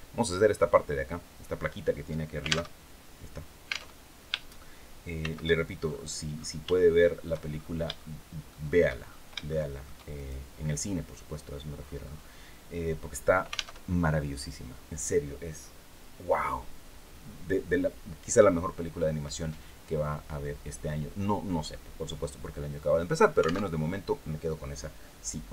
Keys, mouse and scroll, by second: 2.4 alt+Tab, 3.6 alt+Tab, 4.9 shift+c, 5.5-6.3 shift+scroll up 5, 6.4 shift+middle click, 7.2-7.5 shift+scroll up 3, 7.6 shift+middle click, 8.7-9.0 shift+scroll up 2, 9.2 shift+middle click, 9.8 shift+right click, 11.5-12.0 scroll down 2, 13.5 alt+Tab, 23.4 alt+Tab.